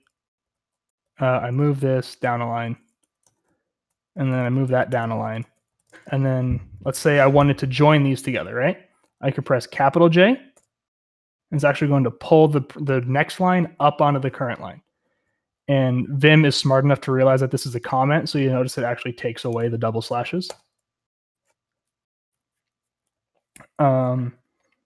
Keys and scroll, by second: 0.0-2.0 typing, 2.0 Return, 3.2 Escape, 3.4-4.7 typing, 4.9 Return, 5.6 Escape, 6.1-7.1 typing, 10.5 shift+j, 20.5 shift+j.